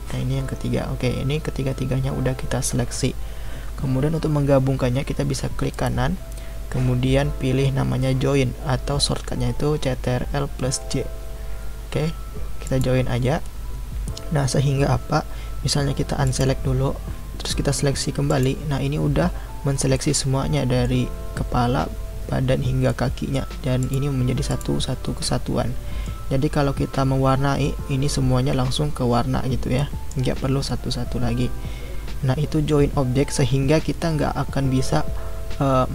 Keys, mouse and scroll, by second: 5.7-8.9 right drag, 16.2 click, 18.3 click, 19.9-23.8 middle drag, 23.8 click, 24.5 click, 25.2-28.2 middle drag, 29.8-32.8 middle drag.